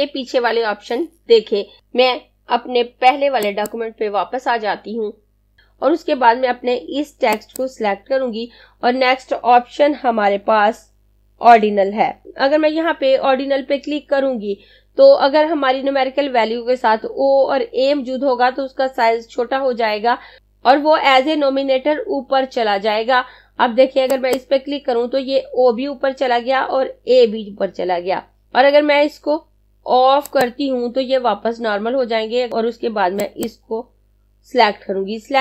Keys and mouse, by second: 3.5 click, 24.2 click, 30.2 click.